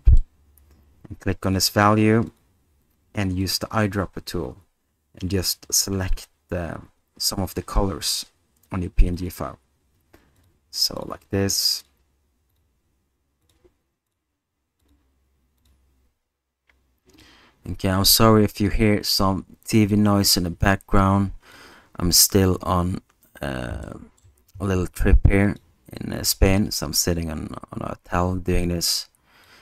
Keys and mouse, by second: 1.5-2.6 drag, 10.4-18.7 drag, 20.0-21.5 drag, 23.8-24.2 middle drag, 25.4 alt+click, 29.5-29.6 drag.